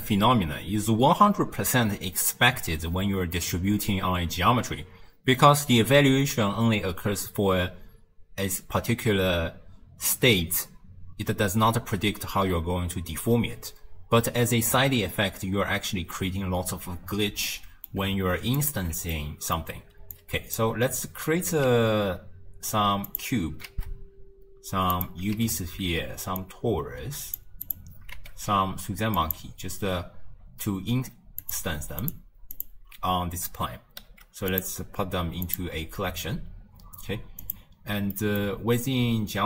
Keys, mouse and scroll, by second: 17.5-18.6 middle drag, 18.6 alt+shift+click, 19.1-20.2 middle drag, 20.2 click, 21.7 shift+a, 23.7 shift+a, 25.4 shift+a, 28.2 shift+a, 31.5 ctrl+click, 32.1 ctrl+click, 32.6 ctrl+click, 34.1 m, 37.5 click, 38.2-39.4 middle drag.